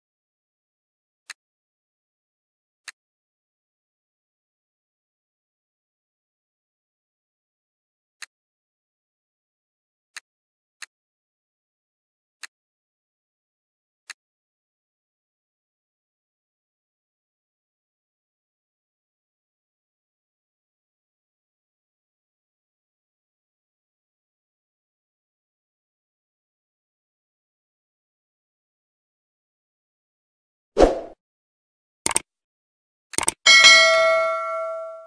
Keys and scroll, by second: 15.5 Caps_Lock, 16.3 c, 17.2 o, 17.4 l, 18.3 e, 19.6 c, 20.8 t, 22.0 i, 22.5 v, 23.1 e, 24.3 Return, 27.1 n, 27.7 e, 28.3 d, 28.8 i, 29.9 a.